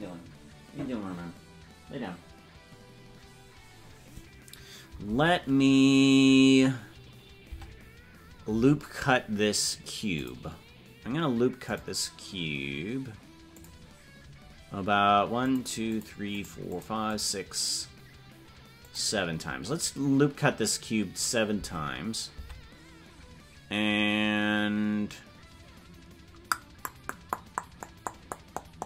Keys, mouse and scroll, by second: 7.5 Tab, 10.1 click, 11.6 click, 13.5 click, 15.4 click, 15.9 click, 16.3 click, 16.7 click, 17.1 click, 18.8 click, 21.6 Tab.